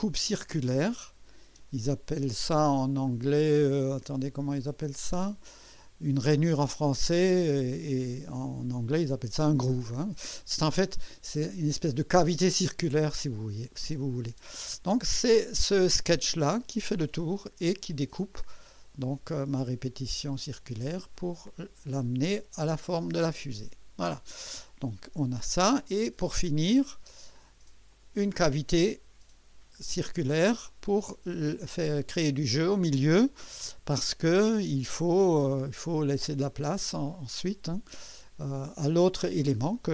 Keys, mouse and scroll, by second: 0.1 click, 0.9 click, 1.5 space, 13.7-15.4 drag, 16.7 click, 18.3-21.1 drag, 21.2-22.0 drag, 26.2 click, 27.1 space, 27.9 click, 28.4-29.3 drag, 29.8 scroll up 2, 30.7-33.2 drag, 33.5 KP_1, 33.9 scroll up 1, 34.5 KP_2, 35.0-35.5 scroll up 1, 35.7 scroll down 1, 36.3-37.4 drag, 39.3 scroll down 1.